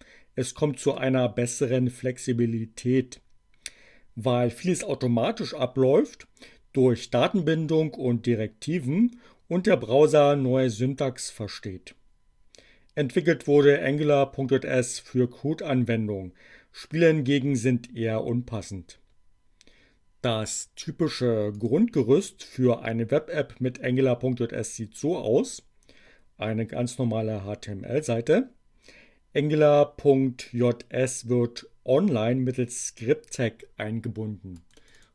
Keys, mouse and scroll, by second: 21.5 click, 34.5 click.